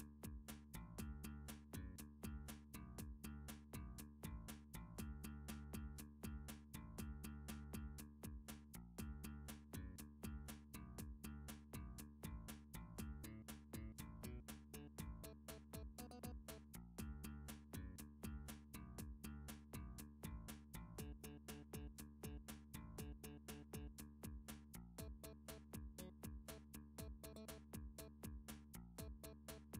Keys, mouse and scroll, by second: 0.5 click, 1.2 s, 2.7 click, 3.5 click, 4.0 s, 6.5 click, 7.3 click, 8.1 s, 9.0 click, 10.2 click, 10.9 s, 11.1 x, 12.9 click, 14.2 click, 14.9 shift+click, 15.9 g, 16.3 z, 17.6 right click, 18.1 g, 19.2 click, 19.6 s, 20.7 x, 21.8 click, 22.1 click, 22.8 click, 23.2 middle click, 23.3 scroll, 23.8 click, 24.1 shift+click, 24.7 s, 25.9 typing, 26.3 click, 27.2 click, 28.1 g, 28.7 y.